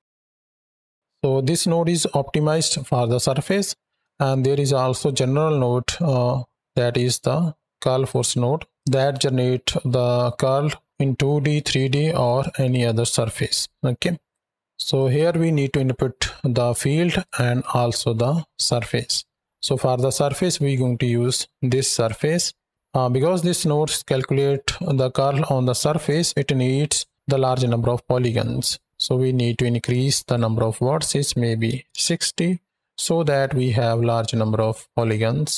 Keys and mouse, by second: 4.1 shift+a, 14.1 right drag, 14.8-16.5 drag, 17.4 click, 19.1 middle click, 20.0-21.9 drag, 22.4 middle click, 29.7-31.8 drag, 34.8-35.3 drag.